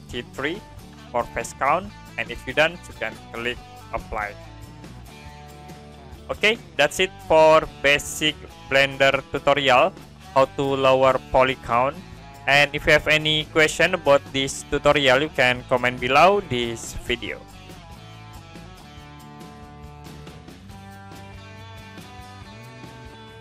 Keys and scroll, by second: 14.9 Print, 18.9 Print.